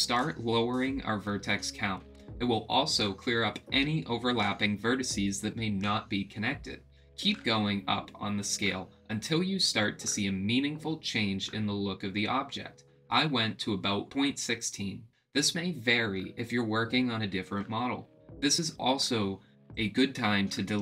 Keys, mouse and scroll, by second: 10.2 click, 10.9 click, 11.7 click, 12.5 click, 13.1 click, 13.9 click, 15.3-16.6 drag, 17.6-18.6 drag, 19.6 click.